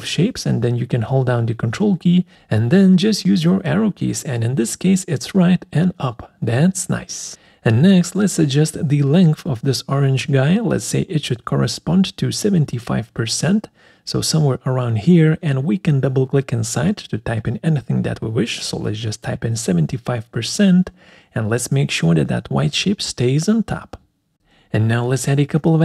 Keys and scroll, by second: 5.0 ctrl+Right, 5.2 ctrl+Up, 15.3 5, 16.0 shift+5.